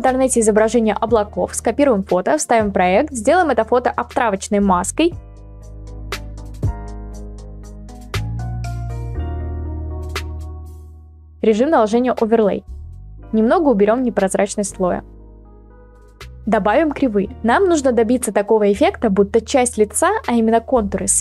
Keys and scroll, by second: 0.0-0.4 typing, 2.6 ctrl+v, 5.1 ctrl+t, 9.6 Return.